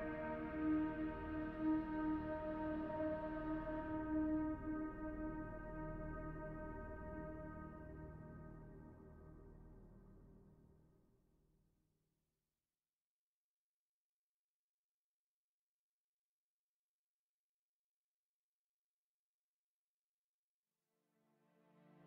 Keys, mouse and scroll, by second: 0.9 middle click, 4.5 middle click, 4.5 click, 5.5 shift+click, 8.5 m, 12.8 Left, 13.0 Left, 17.9 click, 18.6 click, 20.8 scroll down 1, 21.2 shift+middle click, 21.7-22.0 scroll down 1.